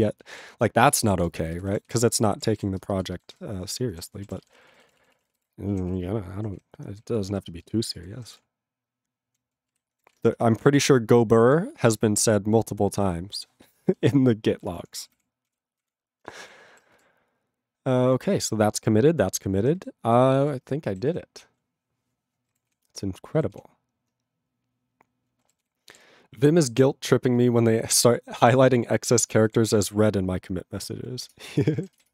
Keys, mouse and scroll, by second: 0.5 ctrl+s, 0.8 ctrl+space, 1.3 ctrl+alt+b, 1.5 ctrl+g, 1.9 ctrl+s, 2.0 ctrl+space, 2.1 ctrl+p, 2.4 ctrl+p, 2.5 ctrl+e, 2.5 ctrl+g, 2.8 ctrl+space, 3.3 ctrl+alt+b, 3.3 ctrl+g, 3.4 ctrl+p, 4.1 ctrl+s, 4.2 ctrl+n, 4.3 ctrl+a, 4.3 ctrl+space, 4.4 ctrl+n, 4.4 ctrl+e, 4.5 ctrl+n, 4.6 ctrl+e, 4.6 ctrl+n, 4.7 ctrl+e, 4.8 ctrl+n, 4.8 ctrl+e, 4.9 ctrl+n, 5.0 ctrl+e, 5.0 ctrl+n, 5.1 ctrl+e, 5.4 ctrl+g, 5.9 ctrl+s, 6.5 ctrl+s, 6.8 ctrl+n, 7.0 ctrl+n, 7.0 ctrl+p, 7.2 ctrl+p, 7.4 ctrl+space, 7.8 ctrl+alt+b, 8.0 ctrl+g, 8.4 ctrl+s, 8.4-9.3 ctrl+p, 9.7 ctrl+e, 10.1 ctrl+s, 11.6 ctrl+s, 16.6 ctrl+s, 20.5 q, 21.1 ctrl+s, 22.7 ctrl+s, 25.6 ctrl+s, 29.2 ctrl+g, 31.3 ctrl+Return.